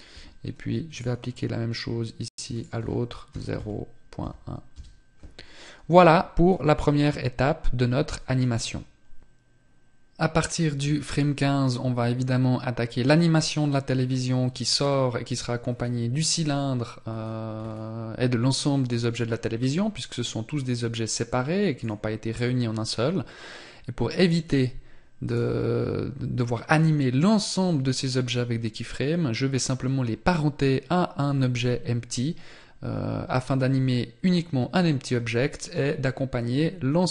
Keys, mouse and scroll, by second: 1.9 click, 5.9 click, 14.9 scroll down 1, 15.7-16.4 scroll down 5, 16.4 scroll down 2, 17.0 scroll down 1, 19.9 click, 23.5 right click.